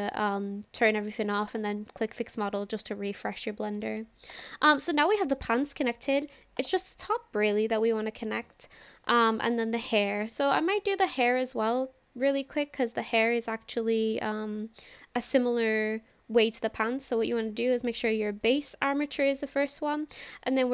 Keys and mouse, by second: 6.6 click, 9.1-9.5 shift+middle drag, 10.2 click, 12.3 click, 12.8 click, 15.0 click, 17.6-18.5 drag.